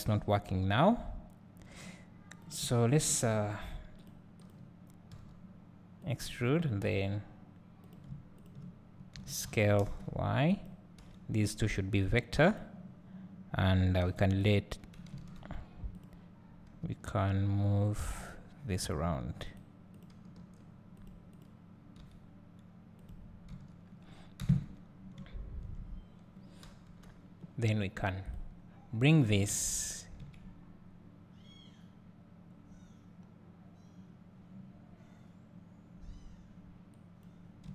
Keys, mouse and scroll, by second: 2.3 click, 3.6 x, 4.4 click, 5.1 e, 6.1 click, 6.8 e, 7.9 click, 8.4 shift+click, 9.1 s, 12.5 click, 14.4 x, 15.2 ctrl+z, 15.9 click, 16.8 g, 18.2-20.0 drag, 18.2-19.9 middle drag, 20.4 g, 20.9 click, 20.9 middle click, 23.1 click, 24.4 KP_Divide, 26.9 KP_7, 29.4 g.